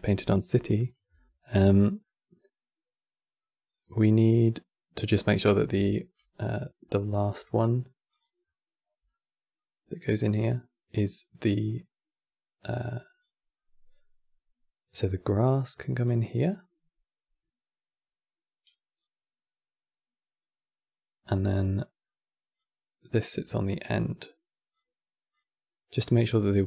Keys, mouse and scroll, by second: 5.0-5.3 scroll down 6, 5.3-7.8 middle drag, 7.8 click, 8.1-11.2 middle drag, 11.3-13.3 drag, 13.3-15.7 middle drag, 15.7-21.0 drag, 21.3-22.2 middle drag, 22.2-23.7 drag, 25.0 click.